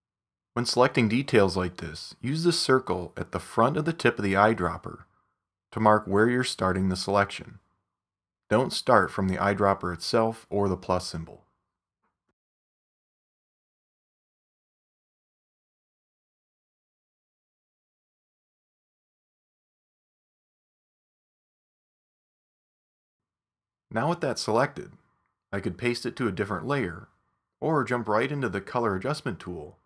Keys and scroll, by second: 25.9 shift+super+0.